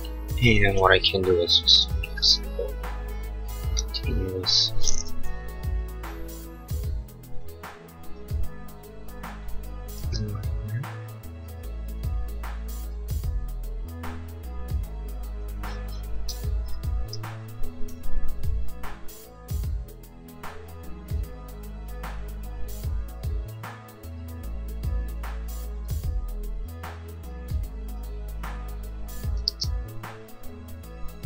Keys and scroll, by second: 2.2 e, 10.0 e, 16.1 space, 24.2 Escape, 27.6 Escape, 29.5 e.